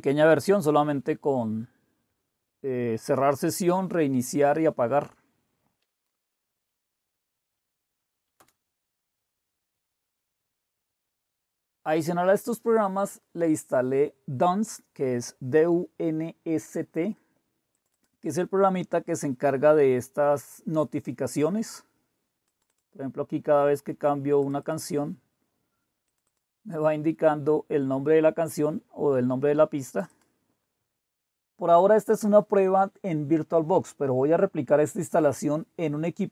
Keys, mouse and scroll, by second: 0.7-1.5 scroll down 1, 1.5-4.2 scroll down 1, 4.2-5.3 scroll down 1, 5.3-6.4 scroll down 1, 6.4 Down, 6.4 Up, 8.4 Return, 17.7 click, 19.0 click, 22.4 click, 24.4 click, 24.6 click, 24.8 click, 26.0 click, 26.4 click, 29.9 click, 30.8 click.